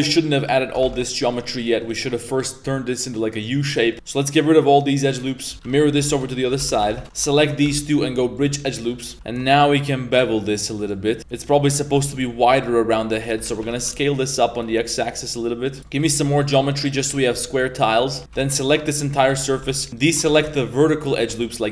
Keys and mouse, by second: 0.1 alt+shift+right click, 0.4 alt+shift+right click, 0.9 ctrl+z, 1.1 alt+shift+right click, 1.4 alt+shift+right click, 1.8 alt+shift+right click, 2.3 middle drag, 3.8 middle click, 3.9 x, 5.2 middle click, 5.5 ctrl+z, 5.5 s, 5.6 s, 6.5 ctrl+z, 6.7 s, 7.0 alt+w, 7.3 alt+shift+right click, 7.6 w, 8.7 middle drag, 9.1 ctrl+b, 11.2 z, 11.2 s, 11.6 middle click, 12.3-14.6 typing, 15.8 ctrl+r, 15.8 z, 15.8 middle click, 16.3 ctrl+r, 16.5 middle click, 16.9 middle click, 17.3 ctrl+r, 17.6 middle click, 18.0 middle click, 18.2 3, 18.5 ctrl+shift+right click, 19.2 z, 19.5 2, 19.8 alt+shift+right drag, 20.3 ctrl+z, 20.5 alt+shift+right click, 20.8 alt+shift+right click, 21.4 middle click.